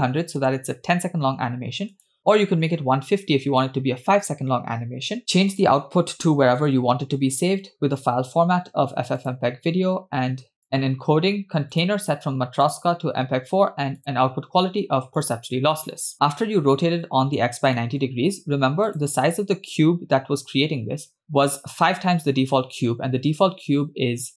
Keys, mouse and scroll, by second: 0.2 0, 1.9-3.6 drag, 5.2-5.5 scroll down 2, 5.5 click, 6.4 /, 7.4-7.7 scroll down 1, 8.0-9.4 drag, 9.7-10.5 scroll down 1, 10.5-11.2 scroll down 4, 10.6 click, 11.7-13.0 drag, 13.2-13.8 scroll down 2, 14.0-15.3 drag, 16.1 middle click, 16.1-16.6 scroll up 2, 17.8 shift+middle click, 18.2 scroll down 1, 18.9 click, 21.3-21.8 middle drag.